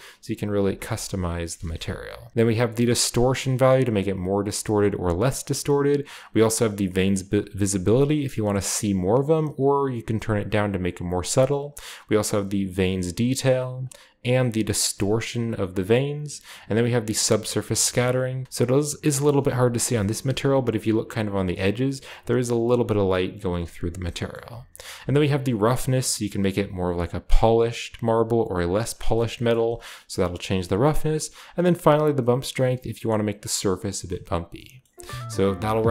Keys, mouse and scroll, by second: 0.5-1.4 scroll down 1, 0.8 ctrl+z, 0.8 ctrl+middle click, 1.4 ctrl+z, 2.3 ctrl+shift+z, 2.3-4.3 drag, 5.5-6.7 middle drag, 7.3-9.4 shift+middle drag, 11.0-12.7 shift+middle drag, 13.3 middle click, 15.4-16.5 middle drag, 17.2 click, 18.4-20.0 middle drag, 19.4-20.2 shift+scroll up 2, 21.1 shift+scroll up 1, 21.8-23.3 drag, 23.3-30.3 middle drag, 23.7-25.3 scroll down 1, 31.0 click, 33.9-35.4 middle drag.